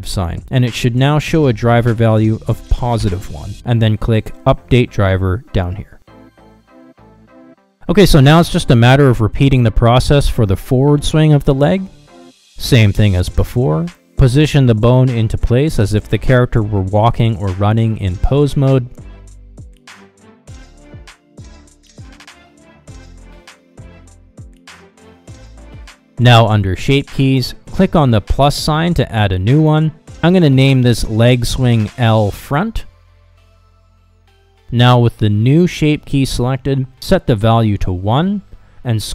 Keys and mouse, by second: 7.6 middle click, 9.2 click, 9.8 a, 10.5 alt+r, 10.7 alt+g, 13.3 KP_3, 13.5 shift+middle click, 13.9 shift+middle click, 14.7 shift+middle click, 15.0 g, 15.8 r, 16.2 g, 19.6 r, 22.4-23.4 middle drag, 26.1 click, 27.6 click, 29.4-33.2 shift+drag, 33.4-34.6 drag, 34.9-36.2 drag, 36.6 click, 38.0 ctrl+Tab, 38.9 shift+middle click.